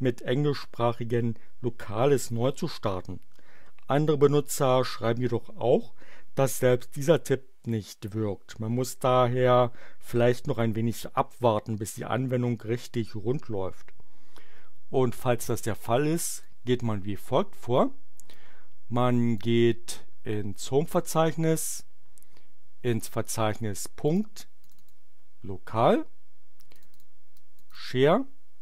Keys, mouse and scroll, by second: 15.4 click, 16.1 click, 18.3-19.5 drag, 21.6-23.1 drag, 24.0 click, 24.6 click, 26.6 click, 27.3 click.